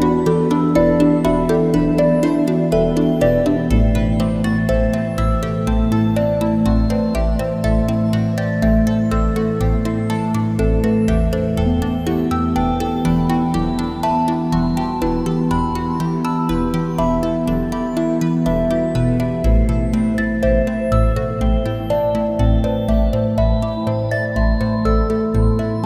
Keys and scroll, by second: 5.1 ctrl+shift+a, 11.5 ctrl+shift+a, 15.7 a, 16.0 space, 20.6 space.